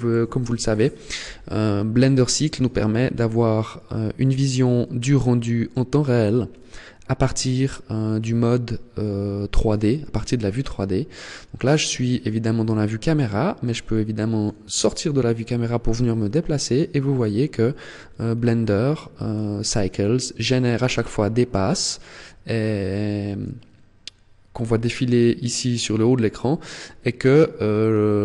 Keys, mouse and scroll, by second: 2.2 click, 9.6-10.2 scroll up 2, 12.8 middle click, 14.6-15.4 scroll up 7, 17.9-18.6 scroll up 9, 19.0 scroll up 1, 26.3 middle click, 27.4-28.2 scroll down 6.